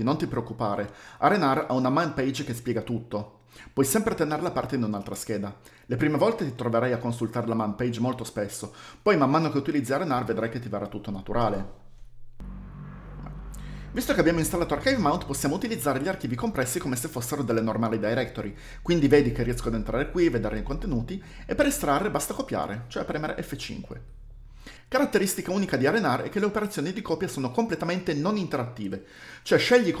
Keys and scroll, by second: 0.9-2.3 typing, 4.9 Page_Down, 5.9 Page_Down, 11.6 alt+1, 22.9 F5.